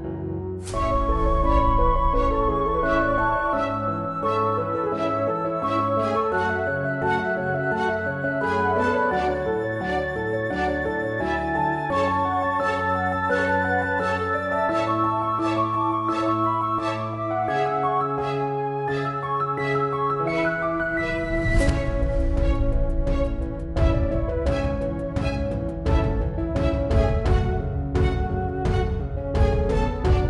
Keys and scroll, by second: 8.7-10.3 typing, 13.3-16.2 typing, 16.7 Return.